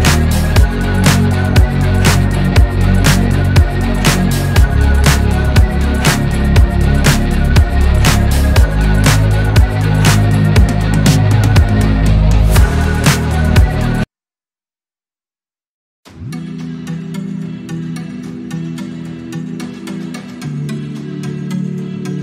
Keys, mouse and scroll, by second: 0.8 Tab, 1.5 click, 1.9 r, 2.9 e, 5.5 Tab, 6.6-7.9 scroll down 1, 7.9 s, 9.2 Tab, 9.7 Tab, 11.1 ctrl+a, 11.5-11.8 scroll up 3, 11.8-12.1 scroll down 1, 12.1 shift+middle click, 12.6 Tab, 12.9 click, 13.8 ctrl+b, 15.4 click, 16.0 ctrl+z, 16.5 ctrl+z, 17.4 ctrl+b, 19.0-20.3 drag, 20.3 ctrl+z, 21.9 ctrl+b.